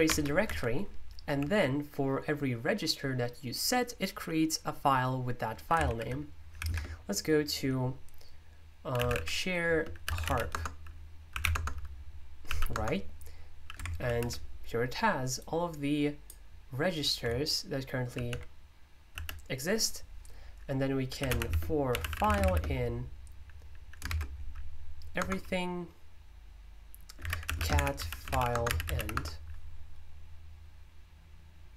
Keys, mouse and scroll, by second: 0.4 Escape, 1.2 typing, 5.8 super+o, 6.5 z, 6.6 space, 8.7-12.7 typing, 15.4-20.8 drag, 20.9-22.8 typing, 24.0 typing, 25.2 typing, 26.9-29.4 typing.